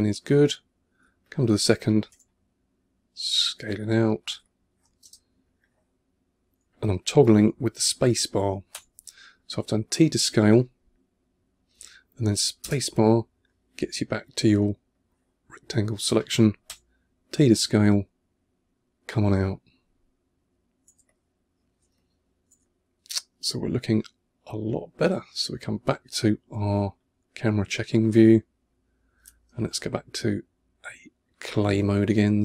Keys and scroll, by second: 0.9 2, 2.0 t, 3.5 2, 4.2 1, 4.9 space, 8.6 t, 12.5 space, 16.5 t, 19.2 2, 20.9 1, 21.8 2, 22.5 1, 26.7 1, 31.5 n, 32.3 c.